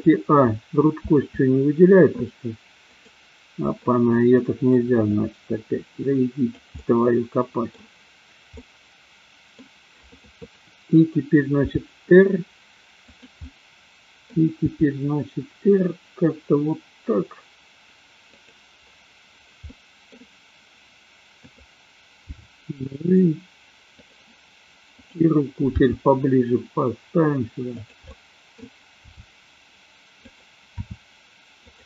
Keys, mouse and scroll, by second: 0.9 a, 2.8 click, 3.8 middle click, 5.1-6.6 drag, 6.8-7.7 middle drag, 8.6-9.6 middle drag, 11.6 r, 13.1 click, 13.4 middle click, 14.7 r, 18.3 click, 19.7 middle click, 21.4 click, 22.2 g, 25.1 click, 25.7 g, 27.8 click, 28.1 scroll up 1, 28.2 middle click, 29.1 g, 30.8 r.